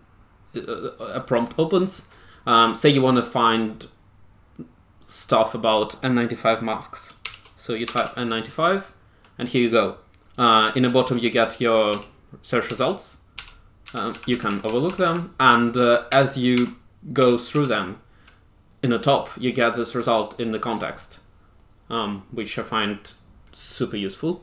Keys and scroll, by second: 6.9-8.4 typing, 11.1 ctrl+j, 11.8 ctrl+j, 12.6 ctrl+j, 13.3 ctrl+j, 13.8 ctrl+k, 14.0 ctrl+k, 14.2 ctrl+k, 14.4 ctrl+k, 14.6 ctrl+k, 15.0 ctrl+k, 16.0 ctrl+j, 16.5 ctrl+j, 17.1 ctrl+j, 17.5 ctrl+k.